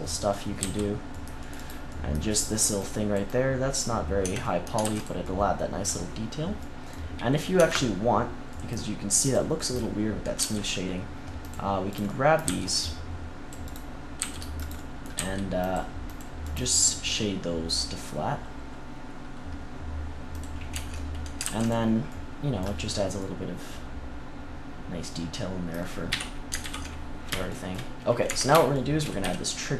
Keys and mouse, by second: 0.5 c, 1.7-3.7 drag, 4.2 Tab, 4.3 click, 4.8 ctrl+s, 5.2-6.8 middle drag, 7.5 Tab, 9.1 middle click, 10.3 c, 12.0-17.7 drag, 12.4 c, 14.1 c, 15.1 c, 20.2-21.4 drag, 20.7 Tab, 21.4 ctrl+s, 22.1-24.0 middle drag, 26.0 KP_3, 26.5 ctrl+KP_3, 28.2 Tab, 29.1 z.